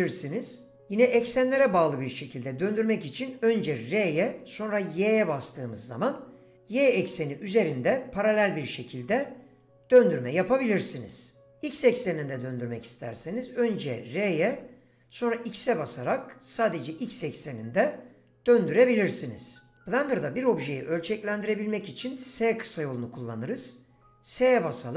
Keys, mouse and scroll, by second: 0.5-3.9 right drag, 3.9 r, 5.0 y, 13.1 r, 14.5 x, 19.7 right click, 24.0 s.